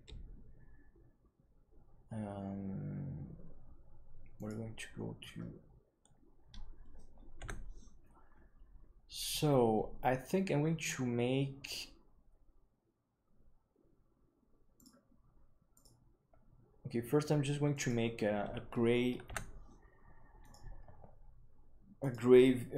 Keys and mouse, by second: 17.7 click, 19.2 KP_1, 22.0-22.7 drag.